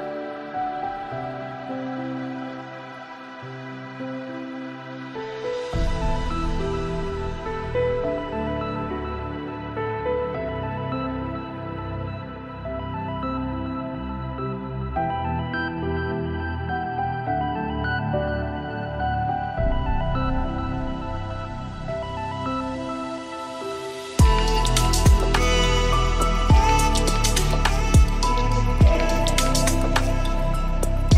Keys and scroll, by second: 25.9 ctrl+z.